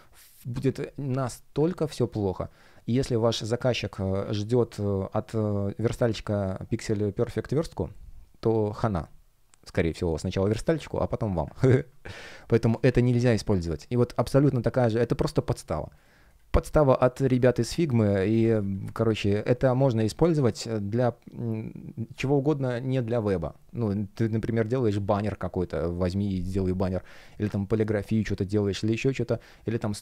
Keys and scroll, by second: 4.2 super+w, 12.1 space.